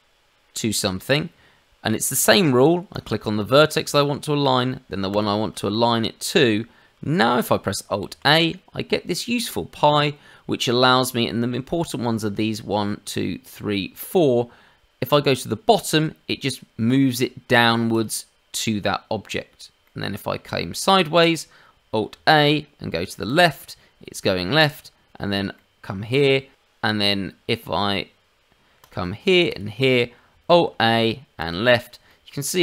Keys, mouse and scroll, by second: 2.3 click, 2.9 click, 5.1 shift+click, 5.7 middle click, 8.0 alt+a, 19.8 middle click, 22.1 alt+a, 24.5 middle click, 25.5 middle click, 26.5 click, 28.8 click, 29.5 shift+click, 30.5 alt+a, 32.0 shift+middle click, 32.4 middle click.